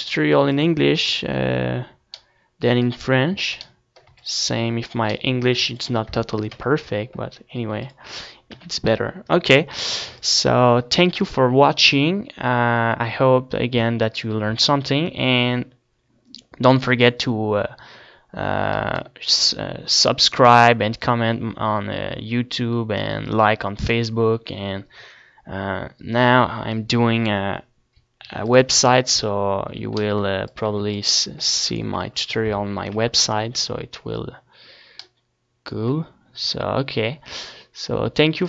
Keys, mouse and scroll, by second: 0.8 ctrl+s, 1.3-4.1 middle drag, 3.6 a, 4.3 ctrl+s, 5.8 ctrl+s, 6.7 KP_0, 7.8 ctrl+s, 8.8 t, 10.4 ctrl+s, 18.9-20.6 right drag, 20.9-28.3 middle drag, 28.3 ctrl+s, 28.5 a, 29.0 a, 29.6 a, 30.4-32.0 drag, 30.6 ctrl+s, 31.9 shift+c, 32.9 KP_0, 33.7 middle click.